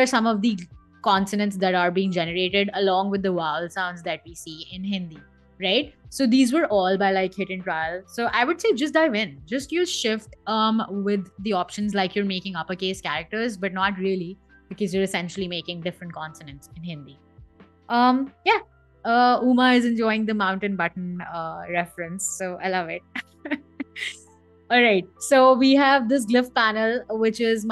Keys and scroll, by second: 8.1 BackSpace.